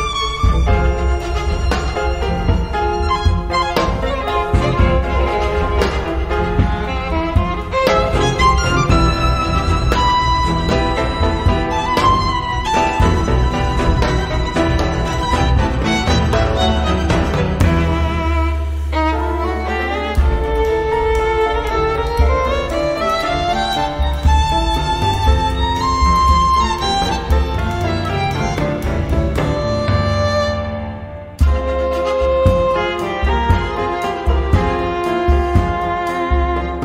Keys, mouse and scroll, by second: 0.6 click, 3.1-3.5 scroll down 4, 3.9-4.3 scroll up 2, 5.0-5.3 scroll up 2, 5.9 click, 6.8 click, 8.6-9.2 scroll down 1, 9.5-9.9 scroll up 1, 10.3 scroll up 1, 10.8 scroll down 1, 11.5-12.2 scroll down 3, 12.5-12.8 scroll up 2, 14.0-14.7 scroll up 4, 14.9-16.2 scroll down 8, 16.6 scroll down 2, 17.2-17.6 scroll down 2, 17.9 scroll up 2, 19.6 click, 21.6 click, 23.2 click, 24.4 0, 26.1 click, 27.0 -, 28.3 x, 28.9 0, 31.3 click, 32.5 x, 33.0 1, 33.8 click, 35.1-36.8 drag.